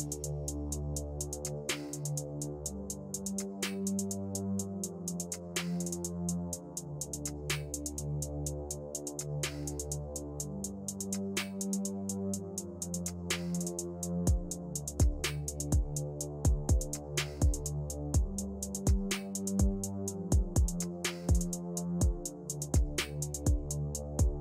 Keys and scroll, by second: 10.6 shift+Page_Down, 14.8 shift+F2, 15.3 Escape, 19.8-24.4 typing.